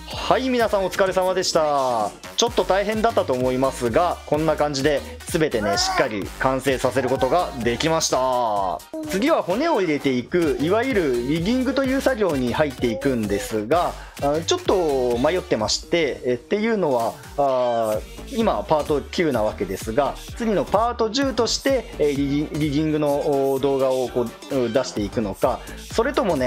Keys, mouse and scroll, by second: 0.0 KP_1, 1.4-4.4 middle drag, 7.8 KP_1.